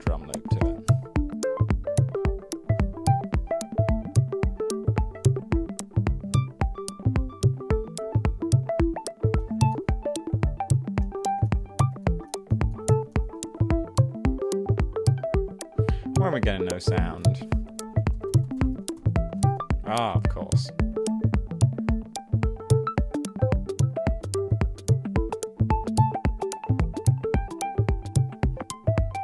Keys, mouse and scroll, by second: 0.2-1.3 typing, 9.5 super+e, 10.0 super+d, 11.1 super+e, 11.7 super+d, 12.3 super+d, 13.0 super+d, 17.0 super+e, 17.6 super+d, 18.7 super+d, 19.2 super+d, 20.3 super+1, 21.5 super+z.